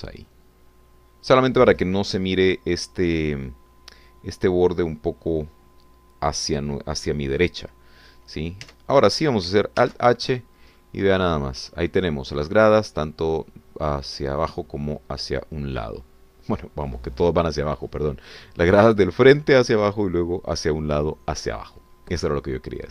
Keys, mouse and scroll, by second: 0.3 shift+click, 9.7 Tab, 10.8 alt+h, 11.4 scroll down 2, 11.8-13.6 drag, 16.9 click, 22.6 scroll up 2, 22.8-22.9 scroll down 2.